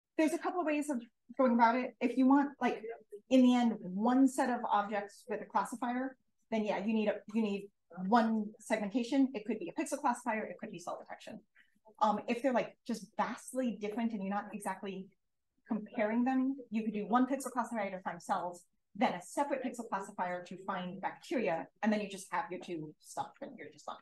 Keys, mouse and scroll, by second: 0.0 2.